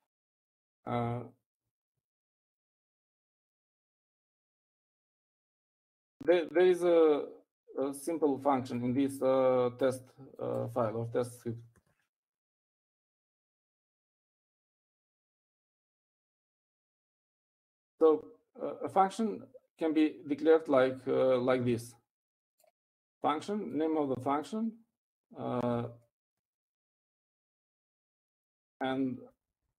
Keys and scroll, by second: 9.2-9.9 typing, 14.6-17.1 typing.